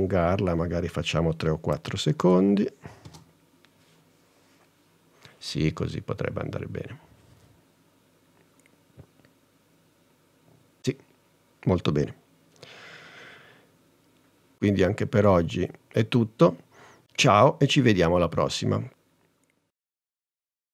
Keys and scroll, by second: 2.3 n, 3.1 space.